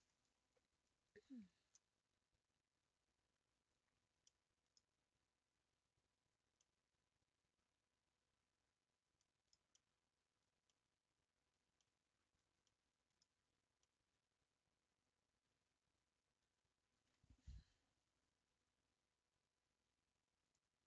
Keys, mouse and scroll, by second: 3.8-4.4 scroll down 2, 4.4-13.6 middle drag, 13.6 scroll up 2, 13.8-17.5 middle drag, 18.6-19.2 scroll down 2, 19.2-19.5 scroll up 2, 20.5-20.8 drag.